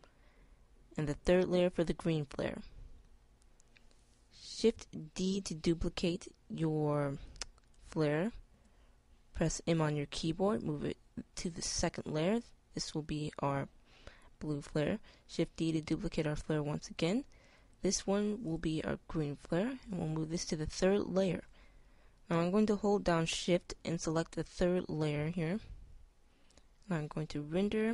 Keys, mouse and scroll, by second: 0.0 middle click, 3.3 middle click, 5.7 shift+d, 9.1 m, 15.9 shift+d, 19.8 m, 24.7-26.7 drag.